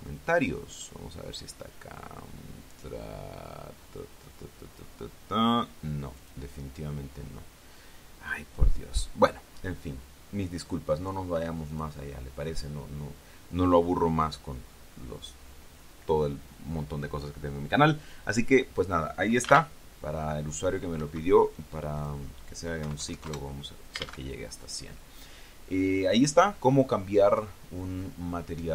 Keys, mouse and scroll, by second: 0.4 click, 3.8-4.9 scroll down 4, 5.6 scroll down 1, 7.0 click, 8.9-9.4 scroll down 2, 10.3-10.8 scroll up 2, 12.5 click, 21.8 Escape, 22.8 click, 23.6 KP_1, 23.8 KP_0, 24.1 KP_Enter.